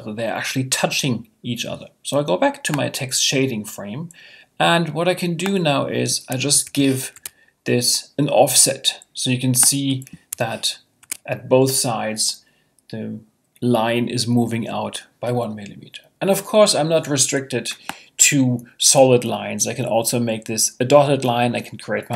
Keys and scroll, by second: 6.6 Tab, 10.3 Tab, 11.0 Tab.